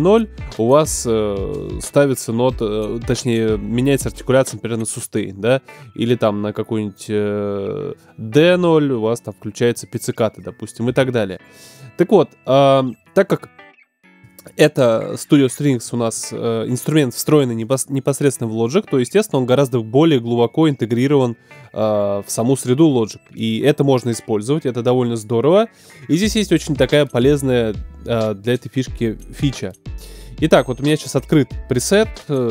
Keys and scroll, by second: 10.8 BackSpace.